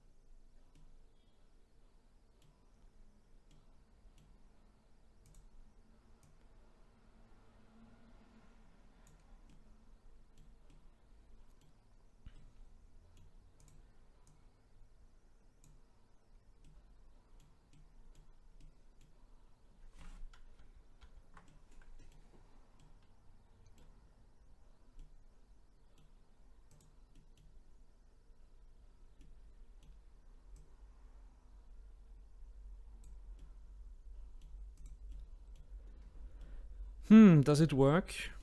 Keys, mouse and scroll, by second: 0.0-0.8 scroll down 1, 0.8-2.8 middle drag, 2.8-3.5 scroll up 1, 3.5-5.3 middle drag, 5.3 click, 6.2-9.2 drag, 9.5-13.6 middle drag, 13.6 click, 14.3 click, 16.6-20.6 middle drag, 20.6 ctrl+z, 21.0 ctrl+z, 21.5 middle click, 22.3-22.8 scroll up 2, 22.8-24.6 middle drag, 24.6-25.5 scroll down 2, 26.7 click, 27.1-30.5 middle drag, 30.5 click, 33.4-34.8 middle drag, 34.8 click, 35.1 middle click, 35.8-36.4 scroll down 1, 36.4-38.4 middle drag.